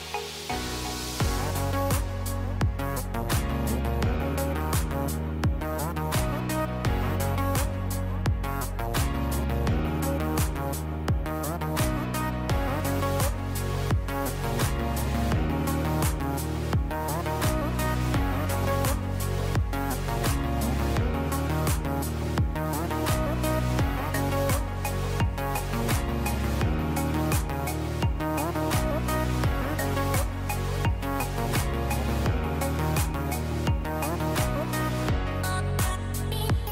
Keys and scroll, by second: 0.4 shift+Page_Down, 3.6 ctrl+v, 6.2 space, 9.2 space, 26.6 space, 31.2 space.